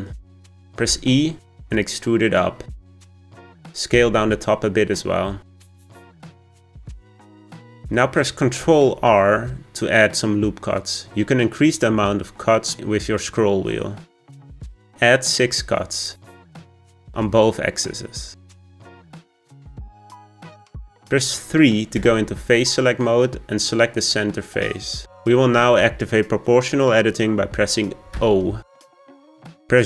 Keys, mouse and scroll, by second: 0.8 e, 3.9 s, 6.2 scroll up 5, 6.8-8.6 shift+middle drag, 8.9 r, 16.4 middle click, 17.2 r, 21.9 3, 23.9 click, 24.8-27.8 scroll down 1, 28.1 o.